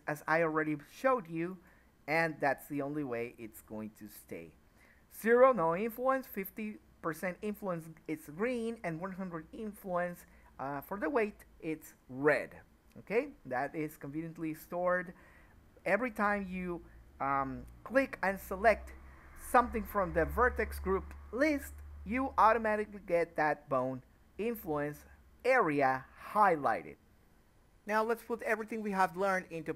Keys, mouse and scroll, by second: 4.7-5.3 drag, 5.4-6.7 drag, 12.6-15.8 middle drag, 16.3 click, 17.4 KP_1, 19.6 click, 20.7 middle click, 21.3-22.6 drag, 23.3 middle click, 23.9 scroll down 1, 24.1-26.6 middle drag, 26.6 click, 27.2-29.2 middle drag.